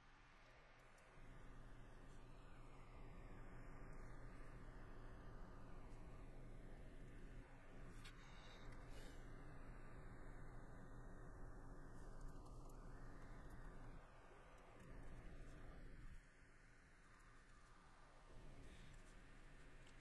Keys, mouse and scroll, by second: 0.4 scroll, 0.6 middle click, 1.1 middle click, 2.8 middle click, 6.0 middle click, 7.2 shift+middle click, 7.7 middle click, 12.4 shift+middle click, 12.7 scroll, 12.8 middle click, 13.5 scroll, 13.6 shift+middle click, 16.2 middle click.